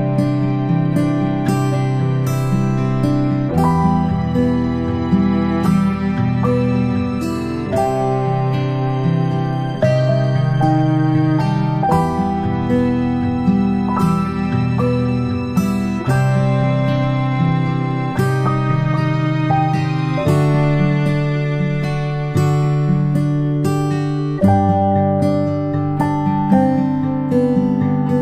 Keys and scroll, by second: 3.4 space, 5.1 space, 5.4 space, 12.5 ctrl+c, 12.6 ctrl+v, 20.6 ctrl+shift+[, 20.7 ctrl+shift+[.